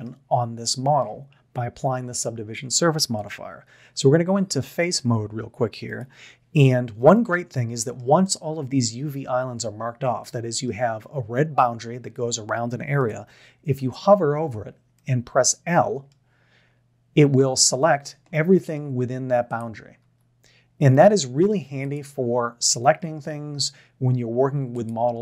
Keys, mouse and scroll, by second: 3.8 3, 7.1-8.0 middle drag, 10.3 middle click, 13.7 l, 14.9-15.5 middle drag, 17.6 l, 20.0 l, 21.0-21.5 middle drag, 21.8 middle click, 22.1 l, 22.7-23.2 middle drag, 23.6 l, 23.8 middle click, 24.9 middle click.